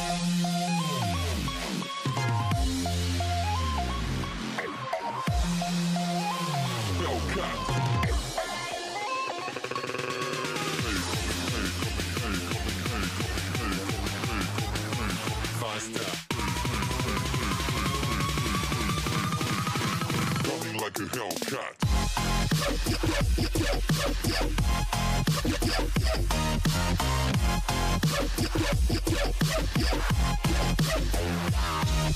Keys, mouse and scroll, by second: 0.5 click, 1.4 click, 2.9 click, 3.6 click, 4.3 click, 4.8 click, 5.2 click, 5.9 click, 6.5 click, 7.0 click, 7.4 click, 7.9 drag, 8.3 click, 8.9 click, 9.8 drag, 10.1 click, 13.5 click, 13.9 click, 14.4 click, 14.8 click, 15.4 click, 16.0 click, 16.4 click, 17.1 click, 17.7 click, 18.2 drag, 18.6 click, 21.2 click, 21.6 click, 23.1-24.4 scroll up 2, 24.4 click, 26.5-27.2 scroll down 3, 27.2 click, 28.4 Tab, 28.7-29.5 scroll up 1, 30.3 scroll up 2, 30.7 click.